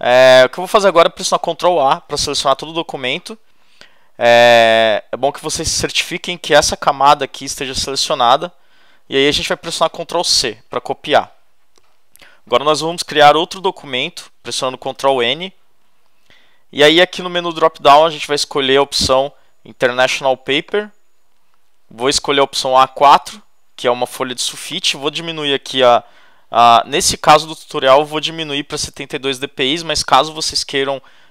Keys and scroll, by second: 1.7 super+a, 10.2 super+c, 14.9 super+n, 25.6 7, 28.7 2.